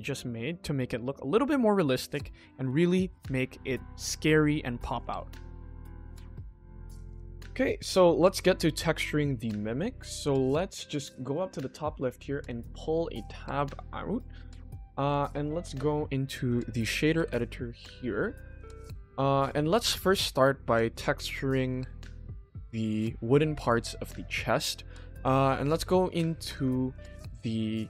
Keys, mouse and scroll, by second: 0.6 middle drag, 1.1 shift+middle drag, 1.4 middle drag, 2.2 shift+middle click, 2.6 ctrl+s, 2.9 middle click, 10.9 click, 12.4-14.1 drag, 15.0-16.5 drag, 17.1 n, 18.3-18.9 middle drag, 19.4 click, 19.6-20.0 scroll up 2, 20.1 shift+scroll down 1, 20.1 shift+middle drag, 20.5 scroll up 1, 20.5 middle click, 20.9-21.3 scroll down 2, 22.0 click, 22.8 click, 23.1-23.6 scroll up 1, 25.4 middle drag, 26.0-26.4 scroll down 1, 26.4 click.